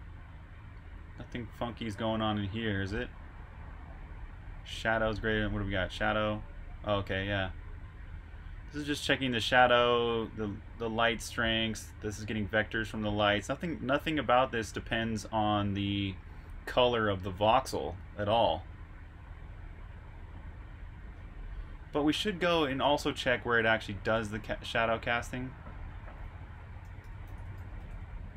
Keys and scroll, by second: 23.1 super+Tab, 27.0-28.3 typing.